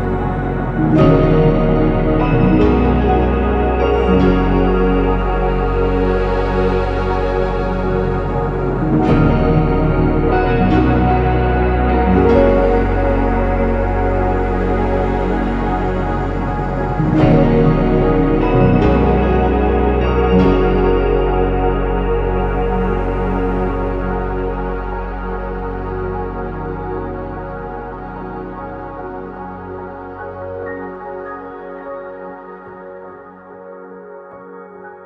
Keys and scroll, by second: 0.0-0.4 typing, 0.7 Escape, 1.5 ctrl+z, 2.9-4.1 typing, 4.6 ctrl+z, 5.7-7.6 typing, 5.9 Return, 6.2 Escape, 7.8 Return, 7.9 ctrl+z, 12.0 ctrl+z, 12.1-13.1 typing, 25.8 Escape, 27.2-28.1 typing, 29.1 ctrl+z, 29.5-30.3 typing, 32.4 ctrl+z, 34.6 Escape.